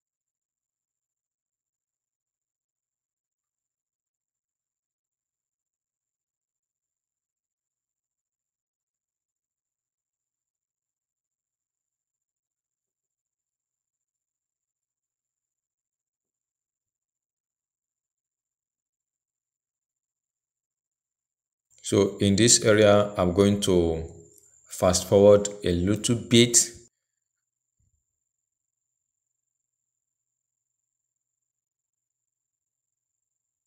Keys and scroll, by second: 14.2 ctrl+a, 19.0 ctrl+d, 20.5 ctrl+j.